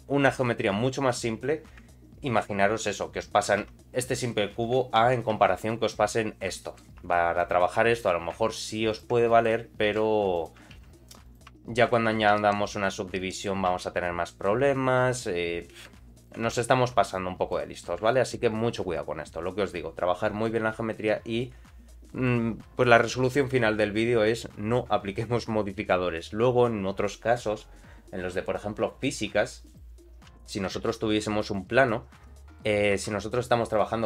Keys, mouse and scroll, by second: 3.6 Tab, 4.0 Tab, 5.0 ctrl+a, 5.3 Tab, 5.5 middle click, 6.2 scroll up 1, 6.6 shift+middle click, 7.0 3, 7.4 click, 7.7 middle click, 8.9 ctrl+shift+click, 9.3 middle click, 9.9 e, 11.5 Tab, 11.6 middle click, 12.4 ctrl+1, 12.6 ctrl+2, 13.1 middle click, 13.8 Tab, 13.8 middle click, 15.9 e, 16.5 Tab, 16.6 middle click, 17.1-17.5 scroll down 1, 17.5 middle click, 18.1-20.2 shift+middle drag, 29.6 click, 30.3 x, 30.8 shift+a, 31.9 scroll down 2, 32.1 Tab, 32.2 middle click, 32.9 Tab.